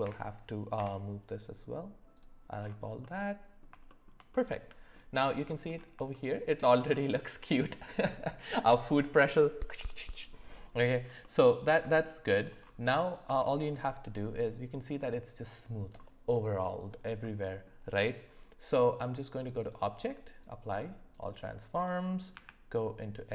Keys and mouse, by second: 3.0-3.6 middle drag, 3.8 shift+middle drag, 4.3-4.9 middle drag, 6.1-6.7 shift+middle drag, 11.2-11.7 middle drag, 12.0 shift+middle drag, 13.4 shift+middle drag, 17.2 middle click, 19.6-21.2 drag, 21.8 click, 22.3 Tab.